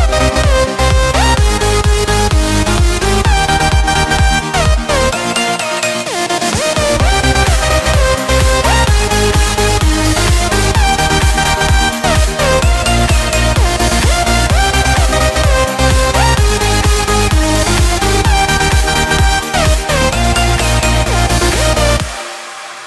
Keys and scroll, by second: 3.2 ctrl+z, 3.5 ctrl+space, 4.5 ctrl+2, 5.1 ctrl+space, 16.7 ctrl+space.